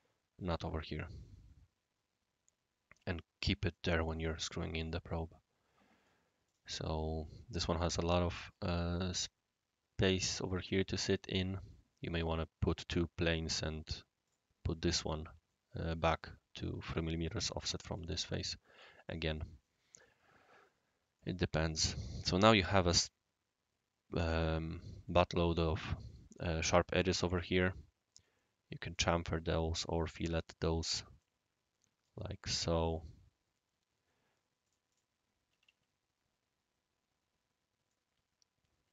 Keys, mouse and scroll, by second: 0.8 scroll down 1, 1.2-3.1 right drag, 3.7 right drag, 4.8-6.1 right drag, 6.4 click, 6.7-7.3 right drag, 10.9-11.7 right drag, 14.2 click, 15.5 right click, 17.7 right drag, 18.7 right click, 19.0 click, 19.3-20.0 right drag, 20.5 scroll up 1, 20.6 scroll down 1, 21.1-21.7 right drag, 21.9-24.0 scroll up 2, 25.4-27.4 right drag, 28.9 click, 30.1 click, 31.2 right click, 32.8 click, 34.6 click, 34.9 click, 35.5 Page_Down, 35.6 Down, 37.6 scroll down 2, 37.9-38.9 right drag.